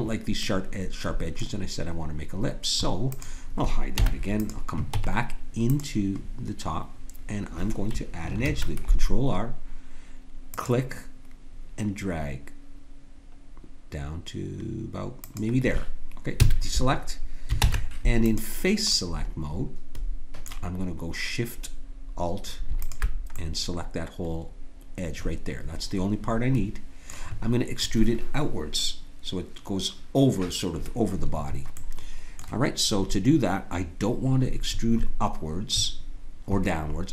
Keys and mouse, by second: 3.1-6.7 drag, 3.9 h, 4.9 Tab, 6.9 click, 8.4 ctrl+r, 16.4 a, 17.6 ctrl+Tab, 22.8-24.6 drag, 24.6 middle click, 31.8-37.1 middle drag.